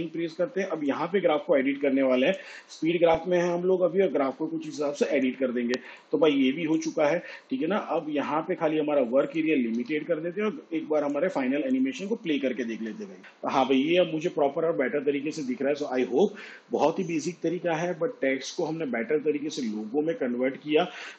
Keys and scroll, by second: 0.4 F9, 10.7 n, 13.2 space.